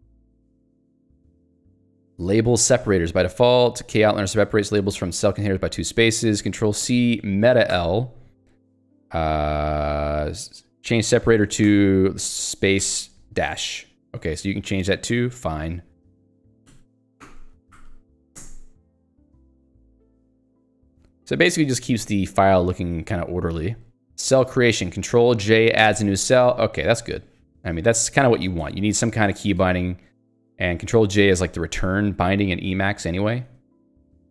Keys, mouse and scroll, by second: 0.3 j, 2.6 k, 4.1 h, 5.3 j, 7.8 ctrl+l, 11.5 space, 11.7 -, 12.2 space, 12.9 Return, 17.2 ctrl+l, 17.7 ., 18.1 space, 18.5 Return, 19.6 j, 24.3 k, 25.9 ctrl+j, 28.0 shift+Up, 28.6 Escape, 29.1 BackSpace, 31.1 End, 31.6 a, 32.0 BackSpace.